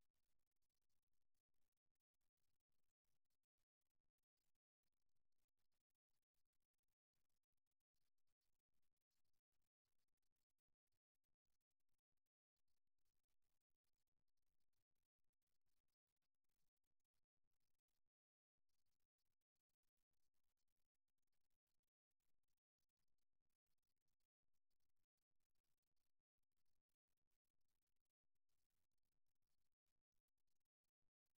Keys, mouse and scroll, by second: 0.5-2.0 drag, 2.0 middle click, 2.9 g, 7.8-12.3 middle drag, 12.3-14.2 right drag, 13.2-14.9 drag, 14.9-15.9 middle drag, 16.7-18.1 middle drag, 19.5 middle click, 21.3 middle click, 23.3-25.1 drag, 27.1-29.0 right drag, 28.6-30.4 drag, 30.6-31.3 middle drag.